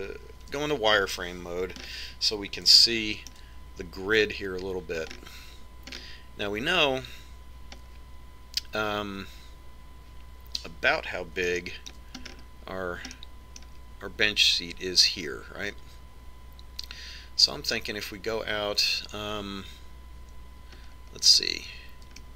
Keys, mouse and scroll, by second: 1.7 z, 2.9-3.9 scroll up 1, 3.9-5.7 middle drag, 6.2-8.8 middle drag, 9.0-10.6 scroll down 1, 10.6 scroll down 1, 12.6-16.1 middle drag, 22.1-22.3 scroll down 1.